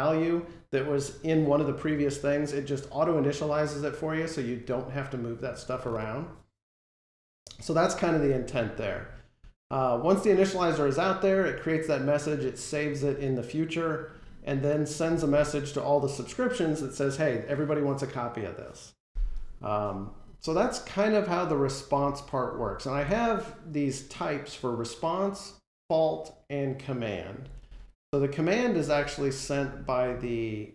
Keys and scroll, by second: 20.4 ctrl+Tab.